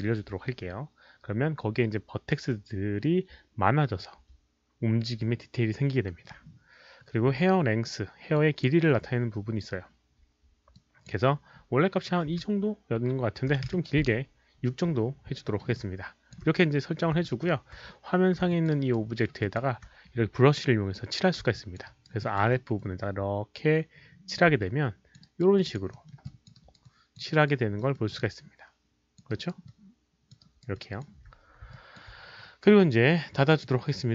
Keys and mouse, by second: 8.3 Return, 8.3 click, 8.3 KP_5, 8.3 KP_1, 10.0 Return, 10.0 click, 10.7 click, 12.1 KP_2, 12.2 Return, 13.4 Return, 13.4 click, 13.4 KP_6, 13.4 KP_2, 15.4 alt+middle click, 15.7 alt+click, 17.2 alt+middle click, 18.4 alt+click, 18.7 alt+right click, 19.0 alt+middle click, 19.4 alt+click, 19.7 Return, 19.7 alt+middle click, 19.7 alt+right click, 19.7 KP_6, 21.5 alt+click, 21.7 Return, 21.7 alt+middle click, 21.7 KP_6, 21.8 alt+right click, 22.2 alt+click, 22.7-24.3 alt+drag, 24.6 alt+click, 25.2 alt+right click, 25.5 alt+click, 25.9 alt+middle click, 26.2 alt+click, 26.5 alt+right click, 26.7 alt+middle click, 26.8 alt+click, 27.1 alt+middle click, 27.3 alt+right click, 27.7 alt+middle click, 28.1-29.1 alt+drag, 28.3 alt+right click, 29.2 alt+right click, 29.6 alt+click, 30.4 alt+right click, 30.7 alt+click, 31.7 alt+click, 33.5 alt+click, 33.5 alt+right click, 33.5 alt+middle click.